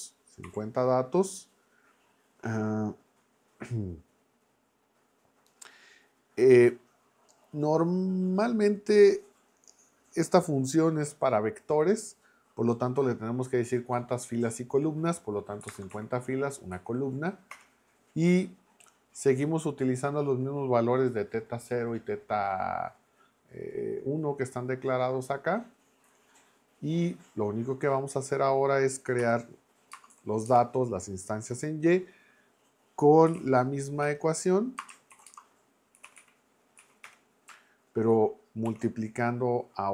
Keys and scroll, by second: 0.4 0, 15.7 space, 15.9 1, 16.7 Right, 17.5 Return, 29.2 y, 29.9 space, 30.1 =, 30.5 space, 33.0-36.7 typing, 34.0 Return, 36.8 Down, 37.0 Return, 38.7 shift+8.